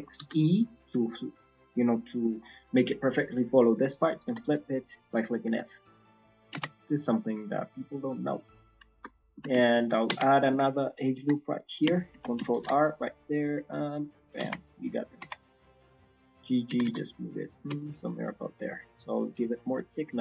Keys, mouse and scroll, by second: 6.7 Tab, 6.7 scroll down 3, 6.9 middle click, 8.6 scroll down 3, 8.8 shift+middle click, 9.1 middle click, 9.6 ctrl+middle click, 10.0 Tab, 10.2-10.8 scroll up 3, 11.1 r, 12.5 ctrl+r, 14.5-14.9 scroll down 2, 14.7 middle click, 15.1 scroll up 2, 15.3 Tab, 15.4 middle click, 15.4 scroll down 1, 15.7-16.1 scroll up 2.